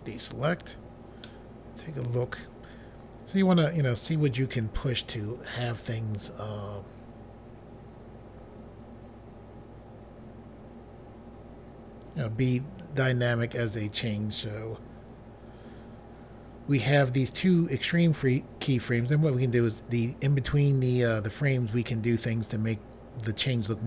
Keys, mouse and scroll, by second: 1.3 middle click.